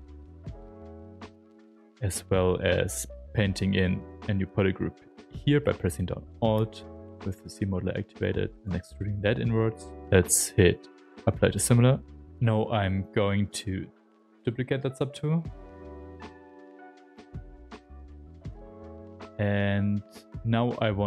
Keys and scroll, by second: 0.8 s, 11.0 s, 17.1-20.1 typing.